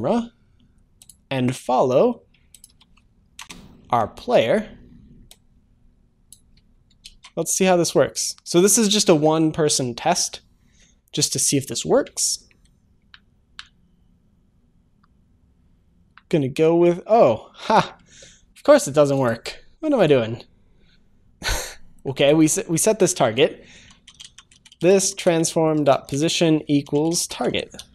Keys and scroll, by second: 25.5 Return, 26.1 Return, 27.8 ctrl+s.